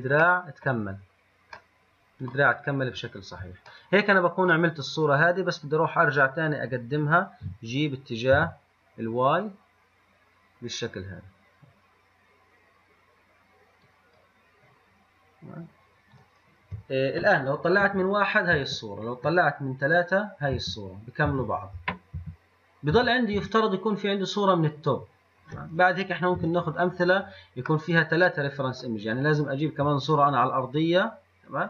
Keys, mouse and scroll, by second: 4.0-5.2 middle drag, 5.2 click, 7.7 g, 15.3-16.4 scroll down 3, 16.4 click, 18.1 KP_1, 18.8 KP_3, 20.8 KP_1, 22.0 KP_1, 23.2 KP_3, 23.6 KP_1, 26.6 n, 28.4-28.8 middle drag.